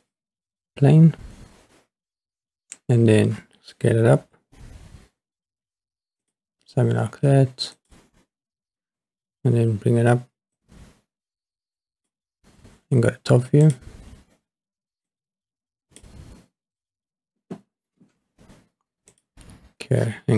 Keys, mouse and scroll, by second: 4.3 s, 6.3 click, 7.8 click, 10.5 click, 13.6 click, 15.1 click, 19.1 click.